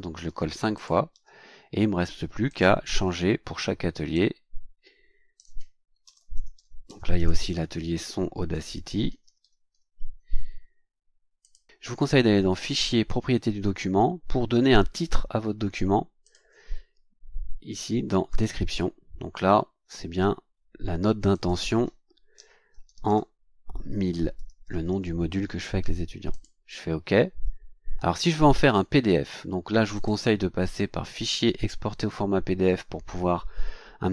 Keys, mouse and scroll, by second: 0.2 ctrl+v, 0.7 ctrl+click, 1.1 ctrl+v, 2.4 click, 4.1-5.6 drag, 5.9-10.2 typing, 7.1 KP_Subtract, 12.5 click, 14.5-14.8 scroll down 2, 16.2 click, 18.3 click, 21.3 click, 22.3-25.3 typing, 26.3 click, 29.9 click, 32.0 click.